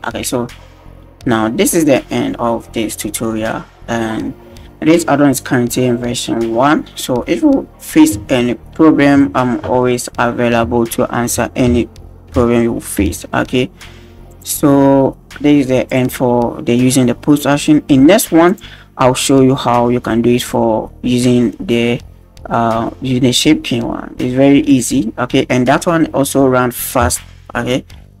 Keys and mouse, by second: 14.3 click, 15.9 click, 18.5 click, 24.7-28.2 right drag.